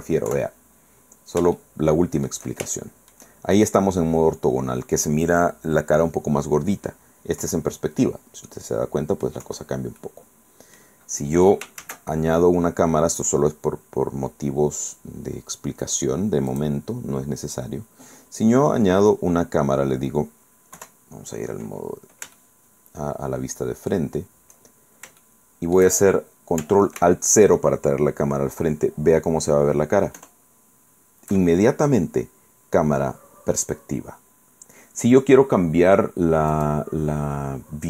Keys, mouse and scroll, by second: 0.0 scroll up 1, 0.4 KP_5, 0.8 scroll down 1, 1.7 shift+middle click, 2.8 shift+click, 2.8 shift+middle click, 3.8 scroll up 2, 4.1-4.4 scroll down 1, 7.5 KP_5, 8.6 click, 8.6 middle click, 9.6 KP_5, 10.1 click, 10.2 middle click, 11.9 shift+a, 16.6 click, 17.9 scroll down 1, 18.8 scroll up 1, 19.7 scroll down 1, 20.9 KP_1, 22.5 shift+click, 23.4 shift+middle click, 25.0 shift+scroll down 1, 25.3 shift+click, 30.3 ctrl+alt+KP_0, 36.6 click.